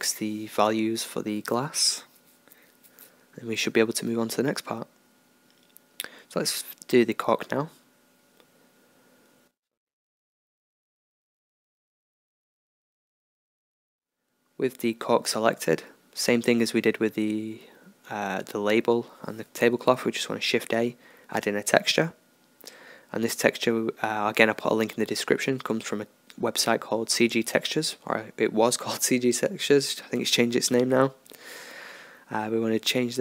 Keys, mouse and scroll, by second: 0.0 Escape, 4.4-6.1 middle drag, 6.1-7.7 right drag, 7.7 KP_0, 7.8 middle click, 8.7-15.8 middle drag, 15.8-18.3 drag, 18.3 shift+a, 24.6 click, 27.5-33.2 drag.